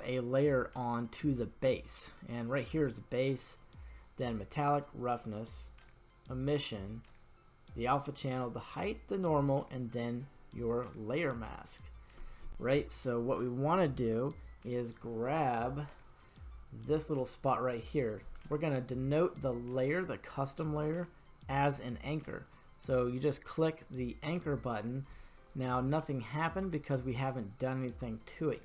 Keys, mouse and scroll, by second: 22.4 click, 25.6-26.7 middle drag.